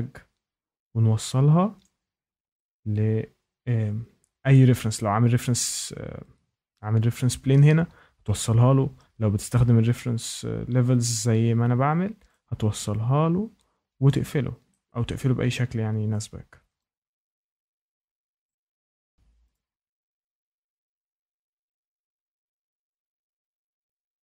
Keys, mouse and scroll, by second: 1.8 click, 2.1 scroll, 4.5 shift+right click, 12.3 click, 14.0 click, 15.1 shift+middle click, 16.2 click, 18.0 click, 18.9 click, 19.5 click, 21.1 click, 22.6 shift+middle click, 23.3 click.